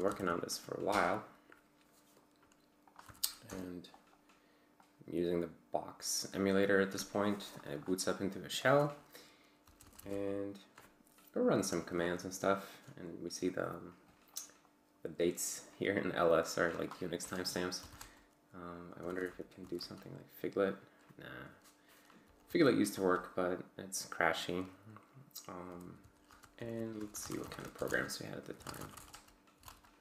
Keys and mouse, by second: 0.0-0.3 typing, 0.9 Return, 2.9 click, 3.0 c, 3.4 Return, 4.8-7.1 drag, 7.6 click, 9.4-10.4 typing, 17.6-20.1 typing, 22.1-22.9 typing, 25.4-30.0 typing.